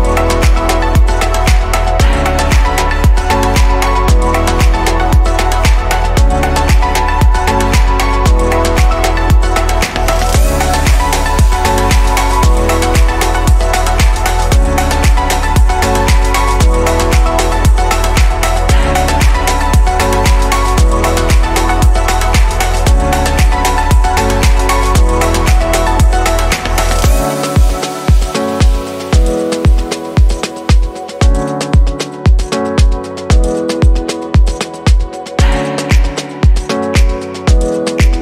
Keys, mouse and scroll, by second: 0.1-1.2 right drag, 1.2-1.7 scroll down 2, 1.7-3.8 shift+middle drag, 3.8 shift+d, 5.3 click, 9.5-13.8 scroll up 3, 13.8-22.3 drag, 25.1-28.0 middle drag, 28.0 click, 28.3-32.3 middle drag, 32.3 click, 34.2 click, 37.6 click, 37.9-38.2 middle drag.